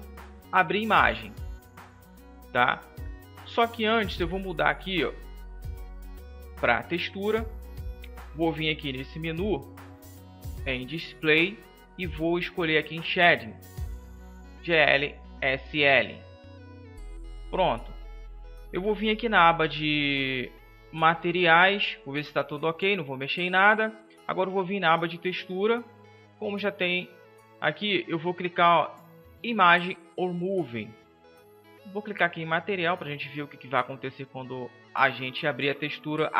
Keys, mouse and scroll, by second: 6.6-8.2 drag, 8.2 n, 14.5-36.1 drag.